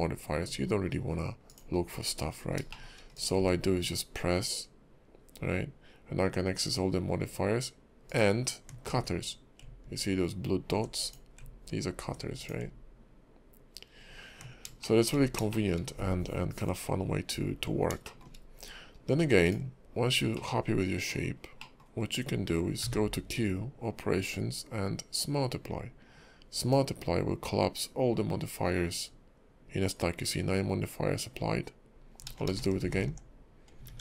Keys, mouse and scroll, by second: 1.8-2.1 scroll up 7, 2.4 scroll down 3, 2.7 shift+middle click, 3.1 click, 8.1 ctrl+click, 11.0 click, 12.4 click, 14.8 shift+middle click, 15.2 scroll down 3, 15.5 shift+middle click, 17.0-17.8 scroll up 2, 18.0 shift+middle click, 18.4 scroll down 1, 19.0-19.4 scroll up 2, 19.4 click, 20.3 middle click, 21.3 scroll down 1, 21.6 middle click, 21.8 scroll down 1, 21.9 scroll up 1, 22.3 scroll down 1, 22.8 q, 32.5 ctrl+z, 32.8 ctrl+z, 33.9 ctrl+`.